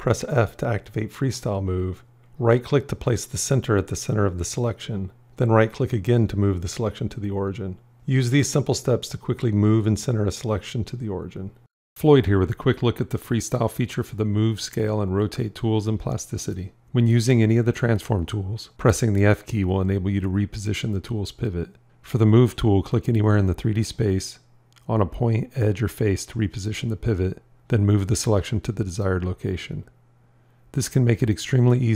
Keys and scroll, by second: 0.9 f, 19.1 f, 22.2 g, 24.8 f.